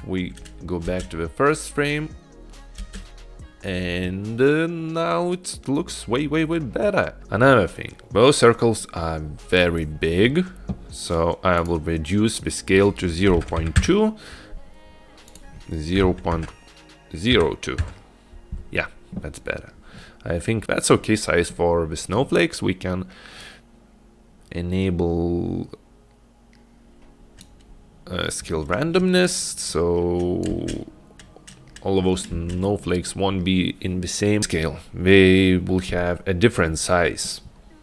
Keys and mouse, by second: 1.1 space, 3.0 space, 11.6-14.5 drag, 15.4-18.7 drag, 23.5-27.5 drag, 30.0 click, 30.7 space, 32.6 space.